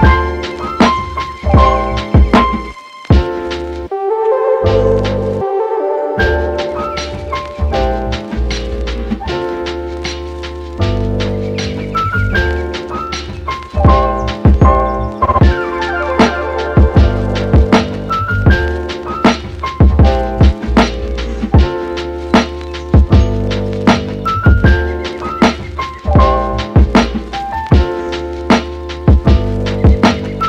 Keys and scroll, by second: 1.2 super+z, 1.9 super+z, 2.1 space, 6.5 super+z, 22.2 space, 24.6 super+z, 29.3 super+z.